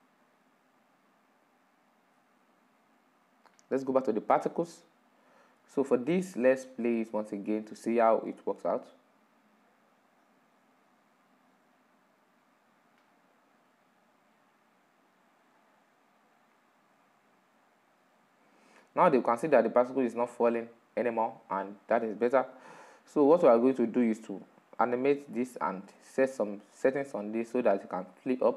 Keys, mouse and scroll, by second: 6.1-7.6 middle drag, 7.6-11.2 drag, 20.3 click, 20.5-28.5 middle drag.